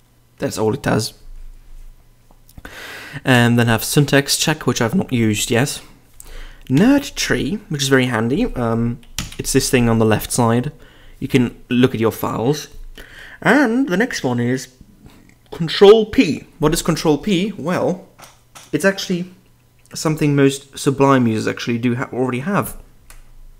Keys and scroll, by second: 2.6-3.3 typing, 6.7 j, 9.1 ctrl+n.